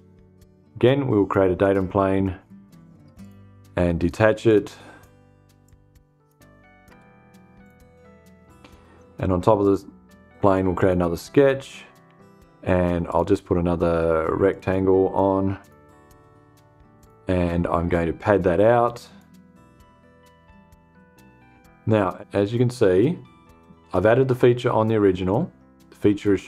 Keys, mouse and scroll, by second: 1.1 click, 2.7 click, 4.0 click, 5.1 click, 6.4 BackSpace, 7.1 click, 9.1 click, 10.3 click, 12.6 click, 14.0 click, 15.1 click, 16.5 click, 18.5 click.